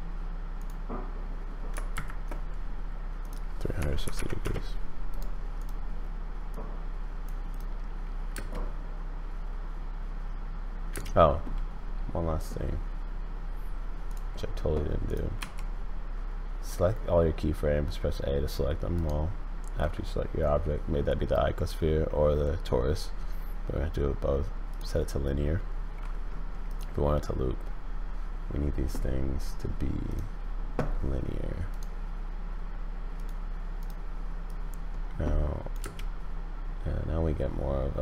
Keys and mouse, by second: 1.9 shift+Right, 3.3-5.6 drag, 6.5 click, 8.3 space, 10.9 space, 14.1 click, 15.0 click, 15.4 a, 18.9-24.8 drag, 26.7 click, 30.1 click, 35.8 space.